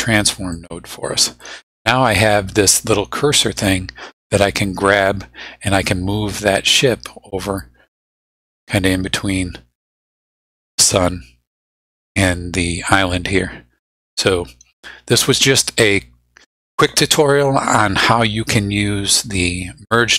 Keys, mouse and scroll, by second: 0.5-1.6 drag, 4.6-9.5 drag.